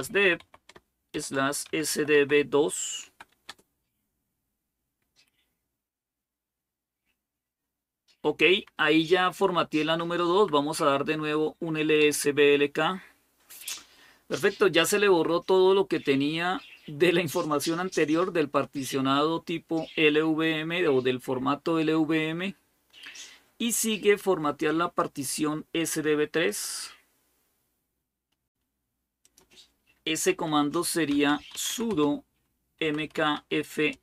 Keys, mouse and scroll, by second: 0.0-3.7 typing, 3.3 Return, 9.6 Up, 10.1 Up, 11.8 Return, 26.3 click, 26.8-28.1 scroll down 3, 28.1 scroll down 1, 29.1 click, 30.9-34.0 typing.